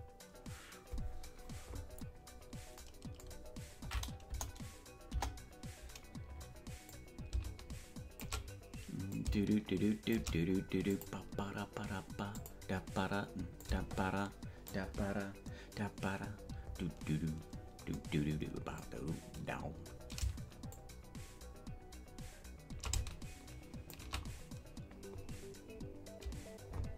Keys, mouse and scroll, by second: 4.3 KP_0, 5.1 KP_0, 6.9-8.3 drag, 9.1-10.3 shift+drag, 10.9-12.6 drag, 13.6-14.8 drag, 20.7-24.1 shift+drag.